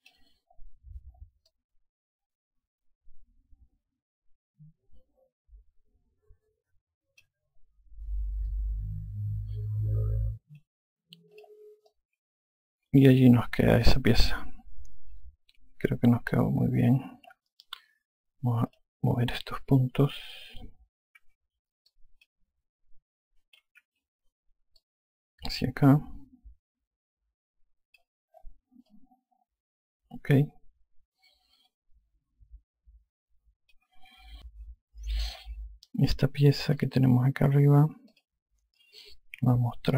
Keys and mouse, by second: 2.4 alt+click, 9.4 alt+click, 12.2 click, 12.8 alt+click, 19.6 click, 21.7-22.6 typing, 22.8 click, 24.1-25.0 typing, 25.6 click, 29.8 alt+click, 37.6 click, 38.9 click.